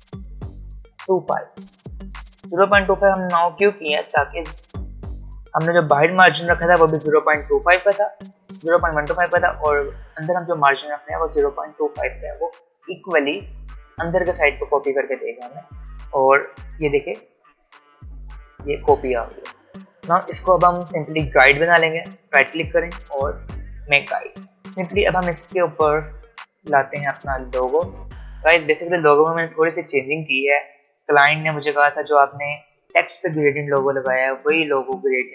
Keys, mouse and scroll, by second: 2.7 click, 17.7 click, 21.8 right click, 23.8 click, 24.7 v.